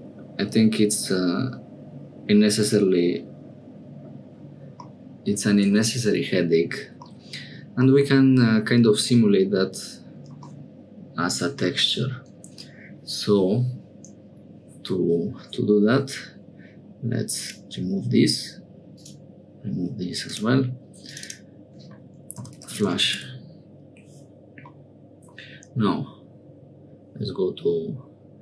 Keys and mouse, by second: 7.5 click, 7.8 click, 10.5 click, 17.3 click, 18.9 click, 20.2 click, 21.0-23.9 drag, 24.7 middle click.